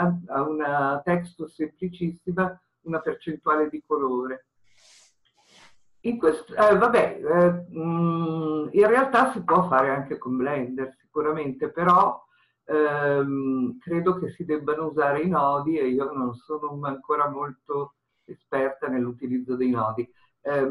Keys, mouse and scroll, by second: 7.8-10.6 scroll up 2, 10.6-13.2 scroll up 1, 13.2-15.7 scroll up 1, 15.7-19.4 scroll up 1, 19.4-20.7 scroll up 1.